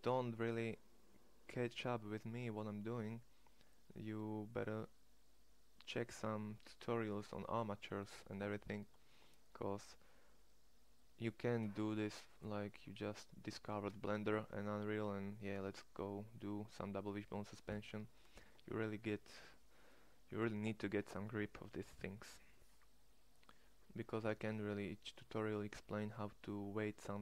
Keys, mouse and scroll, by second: 0.2 middle click, 4.6-11.5 middle drag, 27.0-27.2 middle drag.